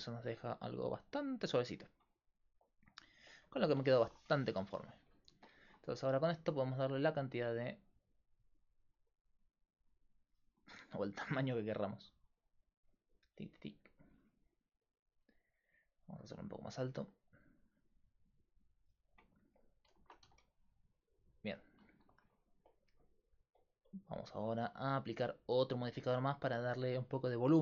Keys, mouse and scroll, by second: 2.3-3.5 middle drag, 4.0-7.3 middle drag, 7.3-20.2 drag, 10.6-11.7 middle drag, 20.2 a, 20.6-27.1 middle drag, 27.1-27.6 drag.